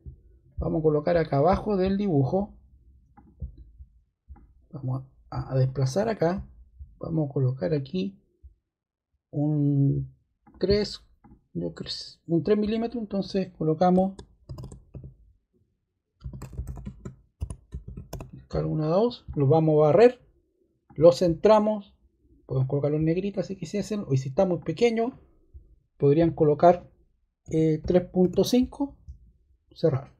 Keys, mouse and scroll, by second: 3.1 click, 4.3 click, 14.4-14.8 typing, 15.9-18.5 typing, 27.1-28.6 typing.